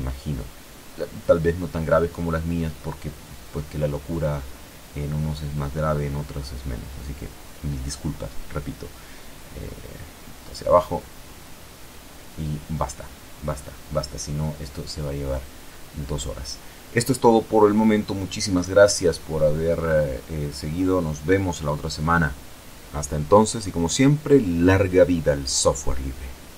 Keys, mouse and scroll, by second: 0.7 alt+shift+right click, 1.6 alt+shift+right click, 2.3 alt+shift+right click, 3.0 alt+shift+right click, 4.0 alt+shift+right click, 6.7 alt+shift+right click, 9.3 e, 9.7 z, 11.2 click, 12.1 KP_0, 21.5 click, 24.5 click.